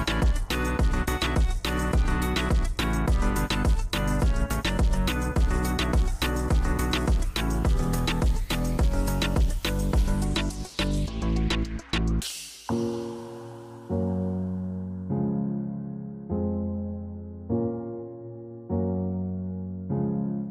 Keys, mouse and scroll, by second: 0.6-0.9 scroll, 1.8 scroll down 1, 9.3 scroll up 3, 9.7-10.0 scroll down 6, 14.1 scroll up 4, 14.5 scroll down 2, 17.7 scroll, 18.3 scroll, 18.4 scroll down 3.